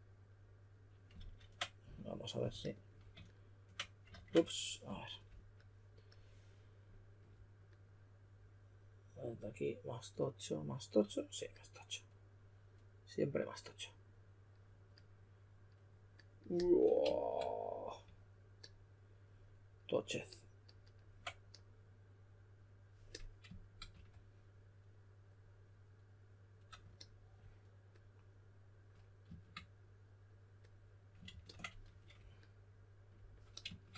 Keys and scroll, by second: 1.1 super+z, 4.0 super+z, 23.9 q, 31.2 super+a, 31.8 2.